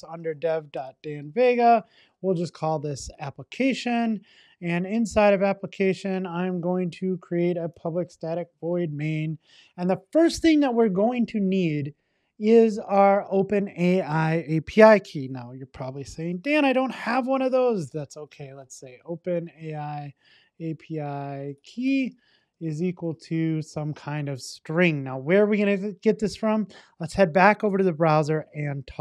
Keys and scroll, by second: 8.2 Return, 24.3 super+s.